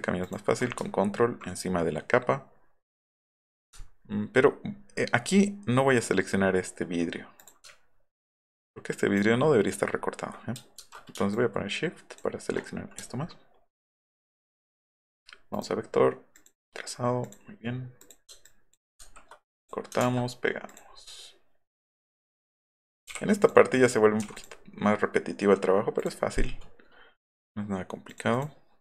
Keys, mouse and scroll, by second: 0.3 ctrl+click, 3.8-4.5 alt+scroll up 5, 4.8 scroll down 1, 4.9 scroll up 1, 7.4 click, 8.6 alt+click, 10.8 ctrl+z, 11.3 shift+click, 13.0-13.3 alt+scroll down 4, 14.5 click, 15.5 click, 16.3 click, 17.2 click, 18.0 click, 18.4 ctrl+click, 19.0 ctrl+x, 20.0 ctrl+v, 22.0-22.5 drag, 23.1 j, 23.4 click, 23.8 click, 24.2 v, 24.3 click, 26.0 click, 28.1 click, 28.3 click.